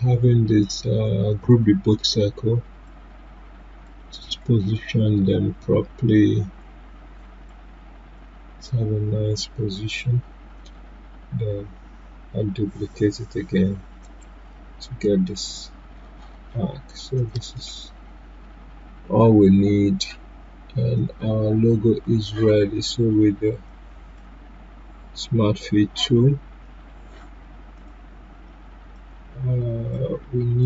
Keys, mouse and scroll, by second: 1.3-10.8 shift+drag, 10.8-14.0 drag, 14.0 right click, 17.1 click, 17.1 click, 17.5 right click, 20.9 right click, 20.9-30.6 drag.